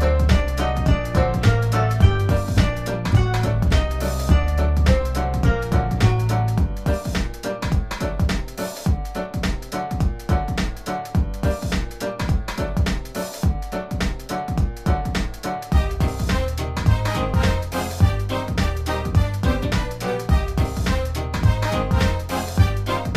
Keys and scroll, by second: 0.2 space, 4.9 space, 10.3-15.3 typing, 17.0-19.8 typing, 18.7 ctrl++, 20.9-23.1 typing.